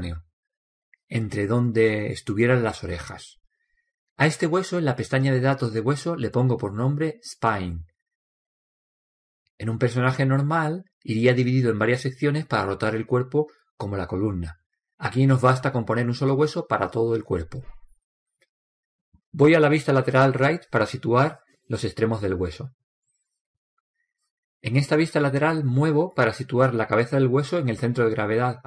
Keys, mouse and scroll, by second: 6.8 click, 9.4 click, 11.8 BackSpace, 11.9 BackSpace, 20.9 KP_3, 23.4-25.2 right drag, 27.2 click.